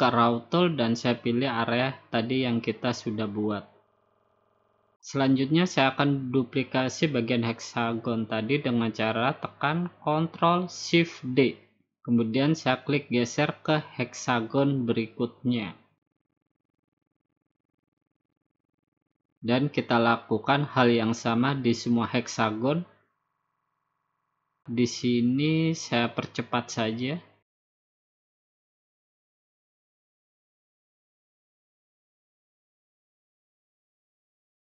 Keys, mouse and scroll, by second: 1.5 click, 2.2 click, 2.7-3.3 scroll down 3, 3.3 scroll down 1, 3.3-3.8 scroll up 2, 5.8 ctrl+shift+d, 9.1-12.1 drag, 11.0 ctrl+shift+d, 12.5-13.6 drag, 14.5-16.5 drag, 15.7 ctrl+shift+d, 17.1-18.2 drag, 19.1-20.5 drag, 20.0 ctrl+shift+d, 21.0 click, 23.0 click, 23.5-24.1 scroll down 4, 24.4 scroll up 1, 24.6 middle click, 25.5 ctrl+shift+d, 27.0 click, 27.7 click, 27.9 ctrl+shift+d, 28.2 click, 28.5 click, 28.9 click, 29.1 ctrl+shift+d, 29.4 click, 30.0 ctrl+shift+d, 30.3 click, 31.0 ctrl+shift+d, 31.2 click, 31.9 click, 32.2 ctrl+shift+d, 32.9 click, 33.1 ctrl+shift+d, 33.6 click, 34.2 click, 34.4 ctrl+shift+d.